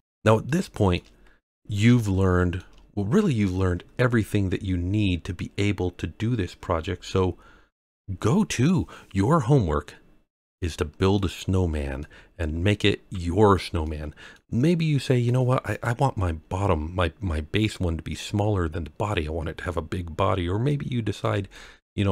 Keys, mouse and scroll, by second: 0.0 scroll down 3, 0.1 scroll down 1, 0.4-0.9 shift+middle drag, 1.2-1.5 scroll down 1, 2.0-2.5 shift+middle drag, 8.4-9.1 scroll up 2, 9.1-11.1 middle drag, 11.5-12.0 scroll down 3, 12.0-12.6 middle drag, 12.9-13.5 scroll up 2, 13.8-14.3 middle drag, 15.1-15.5 scroll down 1, 15.7 click, 20.2-20.6 scroll up 2, 20.6-21.2 middle drag, 21.5 shift+middle drag, 22.0-22.1 scroll up 1.